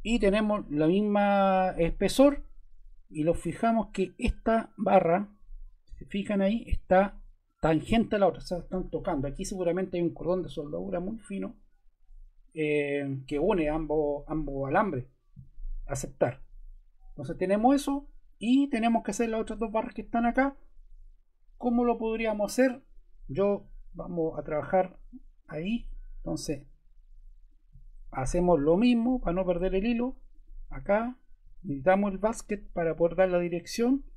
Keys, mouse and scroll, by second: 30.2 click, 32.3 click.